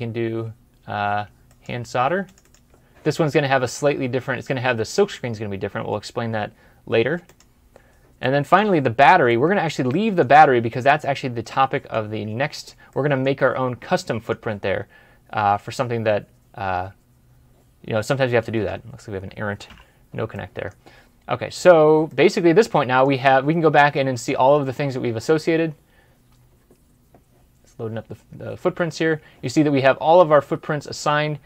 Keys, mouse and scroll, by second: 2.3 double click, 8.1 double click, 8.3 middle click, 12.1-12.8 scroll up 1, 12.8 middle click, 13.2 scroll down 1, 13.8 scroll down 1, 13.9 middle click, 15.8 scroll down 1, 16.9 scroll up 1, 19.6 Delete, 20.2 middle click, 21.5-21.9 scroll down 1, 22.2 middle click.